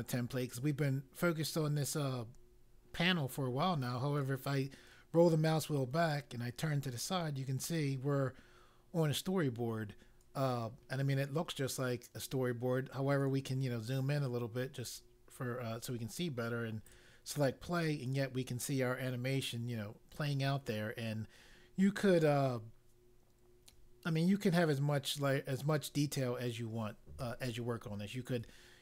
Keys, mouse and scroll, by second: 3.8-4.2 scroll down 1, 7.2 scroll down 1, 8.2 middle click, 10.2 scroll up 1, 11.4 scroll up 2, 13.2-14.0 scroll up 3, 16.8 click.